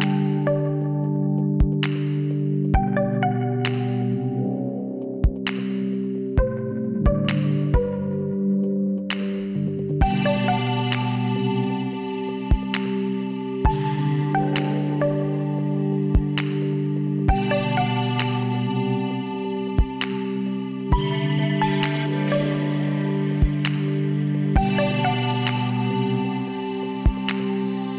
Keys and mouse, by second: 3.0-4.8 middle drag, 4.8 KP_7, 6.4-8.3 drag, 10.0-12.7 drag, 10.4 z, 11.1 b, 13.3-15.0 drag, 15.6-17.4 drag, 16.3 b, 17.4-19.2 drag, 22.3-23.9 middle drag, 24.5-27.9 drag, 25.0-26.3 middle drag, 25.6 z, 26.3 middle click.